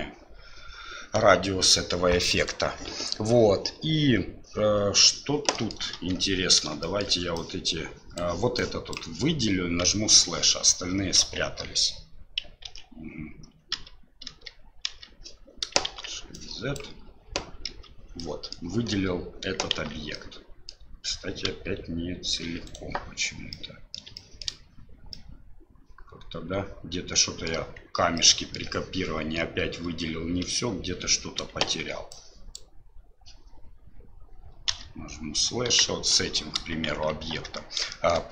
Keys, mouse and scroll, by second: 5.5 middle click, 5.9 KP_7, 6.8 middle click, 7.3 click, 8.6 click, 9.8 KP_Divide, 11.2 KP_1, 12.7 ctrl+z, 13.7 KP_Divide, 14.5 KP_Divide, 14.9 KP_Divide, 15.9 shift+z, 16.3 click, 17.7 KP_Divide, 18.2 middle click, 19.7 shift+z, 20.1 middle click, 21.5 KP_Divide, 22.7 right click, 23.5 middle click, 24.2 middle click, 25.1-27.5 middle drag, 28.2 middle click, 30.6 KP_7, 31.6 shift+z, 32.1 click, 35.7 KP_1, 36.9 shift+z, 37.9 shift+middle click.